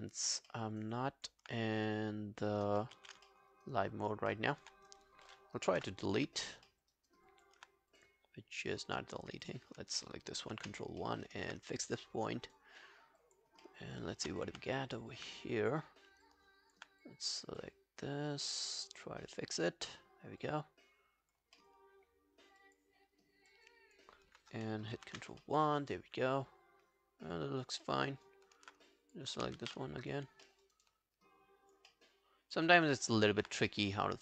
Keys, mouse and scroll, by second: 0.5 alt+middle click, 0.7 alt+right click, 1.0 alt+click, 3.2 ctrl+z, 3.3 alt+middle click, 3.5 alt+right click, 3.8 alt+click, 4.3 alt+middle click, 5.8 Delete, 6.7 alt+middle click, 6.9 alt+right click, 7.3 alt+click, 10.5 ctrl+i, 10.8 ctrl+scroll down 2, 11.0 alt+middle click, 11.3 alt+right click, 11.7 right click, 12.8-13.5 scroll up 3, 13.6 alt+middle click, 14.0-14.4 alt+scroll up 1, 14.5 f, 14.9 scroll up 1, 16.0-16.3 scroll down 4, 16.3 alt+click, 21.6 alt+middle click, 22.0-22.6 alt+scroll up 1, 22.6 alt+click, 23.0 alt+scroll down 1, 23.5 alt+click, 25.0 ctrl+i, 25.4 alt+middle click, 25.7 alt+right click, 26.0 alt+click, 28.1 alt+right click, 29.6 ctrl+z, 30.5 alt+middle click, 30.7 alt+right click, 30.9 alt+click, 31.9 alt+middle click, 32.3 alt+scroll down 1, 32.6 alt+click, 33.0 alt+middle click, 34.1 alt+click.